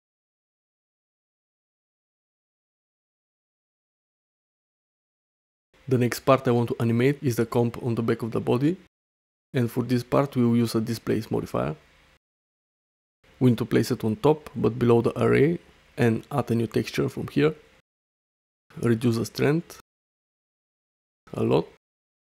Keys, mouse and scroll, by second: 0.4 shift+middle click, 0.6-2.3 middle drag, 2.7-3.3 middle drag, 2.9 click, 3.1 click, 3.3 click, 3.4 middle click, 6.4 space, 6.7-7.0 shift+middle drag, 7.5 middle click, 7.7-10.4 middle drag, 10.7-15.9 drag, 16.5 click, 18.1 shift+middle click, 19.3 shift+middle click, 20.4-20.8 middle drag, 21.5-22.2 shift+drag.